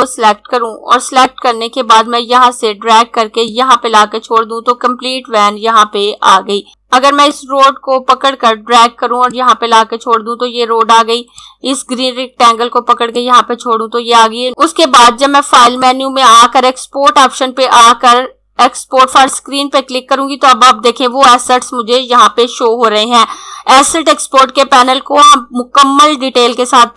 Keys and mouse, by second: 6.7 z, 7.3 click, 15.7 click, 19.0 click.